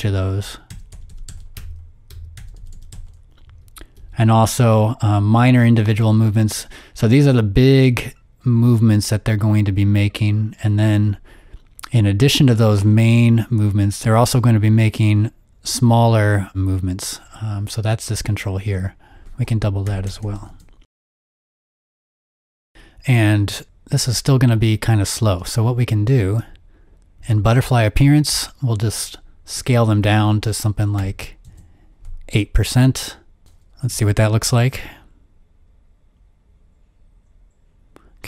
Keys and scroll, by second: 0.6-3.9 typing, 20.2-21.0 typing, 21.0 Return, 23.4 space, 25.3 space, 26.1 space, 31.0 8, 31.4 Home, 33.4 ⍰, 33.8 0.